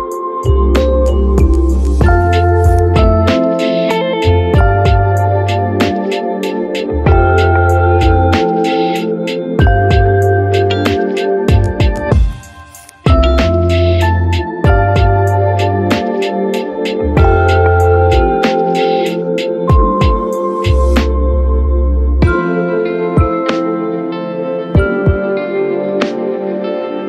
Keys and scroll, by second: 2.0 ctrl+z, 3.3 ctrl+z, 4.2 ctrl+z.